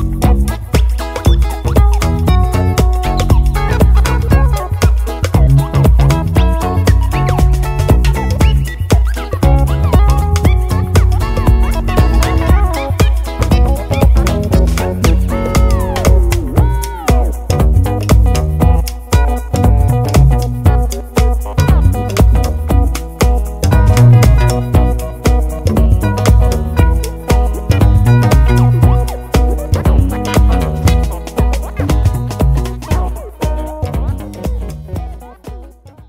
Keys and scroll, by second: 5.3 super+d.